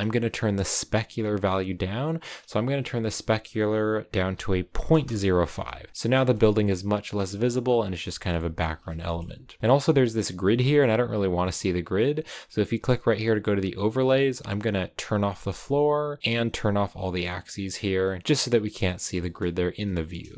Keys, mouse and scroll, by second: 0.0-5.0 drag, 5.9 scroll up 4, 6.0 scroll down 2, 6.2 shift+middle click, 7.2 scroll up 2, 7.7-8.1 scroll down 2, 8.1 a, 8.3 shift+middle click, 9.1-9.8 scroll down 1, 15.4-16.9 drag, 18.9-20.3 shift+middle drag.